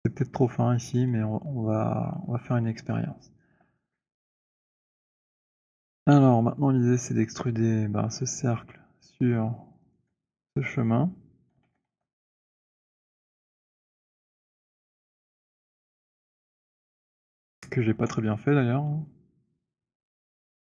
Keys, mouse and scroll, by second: 2.1 middle click, 2.3 middle click, 2.5 middle click, 4.4 alt+click, 4.6 alt+click, 4.6 scroll, 5.3 alt+middle click, 10.1 shift+click, 11.7 alt+d, 11.9 alt+f, 12.3 scroll, 12.8-13.3 scroll, 15.6 alt+click, 16.9 click, 20.3 scroll.